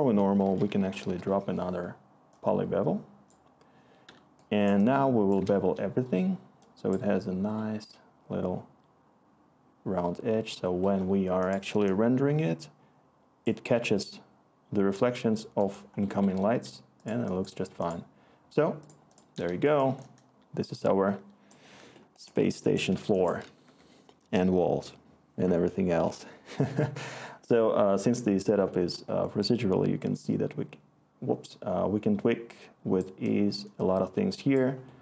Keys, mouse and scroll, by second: 0.0 Tab, 0.1-1.2 typing, 4.1 click, 12.2-15.5 scroll, 22.8 click, 23.6 Return.